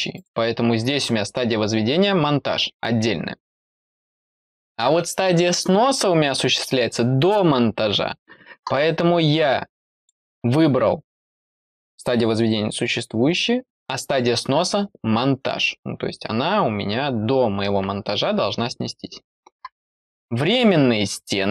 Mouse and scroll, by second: 0.1 click, 9.9 click, 20.4 click.